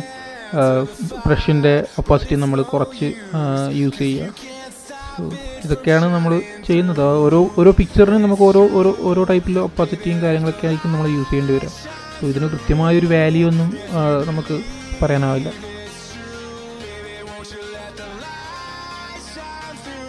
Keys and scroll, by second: 8.1 super+-, 8.6 super+-.